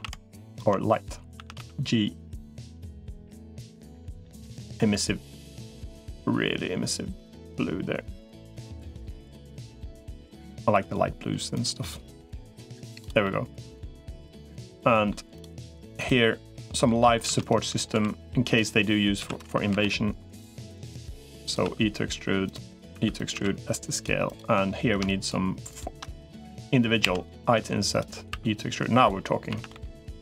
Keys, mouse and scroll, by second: 1.2 a, 1.4 g, 5.2 g, 11.6 middle click, 13.0 middle click, 14.4 middle click, 15.8 click, 16.0 middle click, 17.2 shift+d, 17.8 s, 19.0 s, 20.8 click, 21.4 e, 22.8 e, 23.2 s, 25.0 shift+click, 26.2 i, 28.2 e, 29.4 a, 29.6 g.